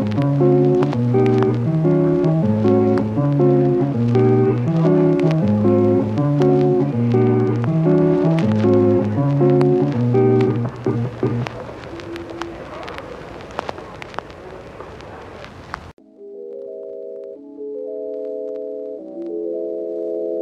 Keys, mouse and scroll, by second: 0.4 e, 0.9 click, 2.9-3.4 ctrl+r, 4.9 g, 5.1 g, 5.5 g, 5.6 g, 5.7 click, 6.6 click, 7.2 i, 7.7 click, 8.5 s, 9.7-12.0 typing, 10.2 click, 12.5 click, 13.8 g, 13.9 y, 16.4 i, 16.7 click, 17.3 s, 17.5 click, 18.7 g, 18.9 y, 19.2 click, 20.0 i, 20.1 g, 20.2 y.